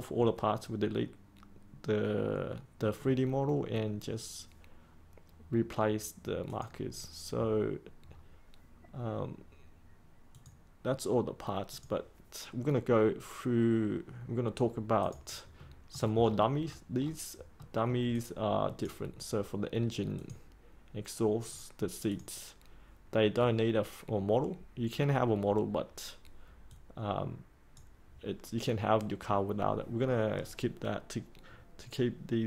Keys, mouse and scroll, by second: 8.0-9.0 scroll up 1, 10.2 click, 15.5 middle click, 16.1-16.5 scroll down 1, 16.5-16.9 scroll up 1, 16.9-17.5 scroll down 1, 17.5 middle click, 18.1-32.4 drag.